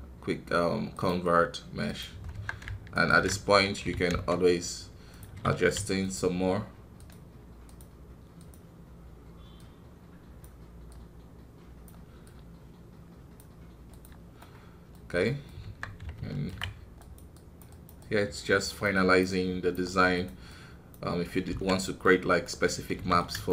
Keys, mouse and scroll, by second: 2.9 alt+right click, 3.8 g, 6.9-9.9 drag, 14.3-15.6 middle drag, 15.6 Tab, 16.9-21.2 drag, 21.2 scroll up 4, 21.4 ctrl+z, 21.7 middle click, 22.6 scroll up 1, 22.9 f, 23.4-23.5 shift+middle drag.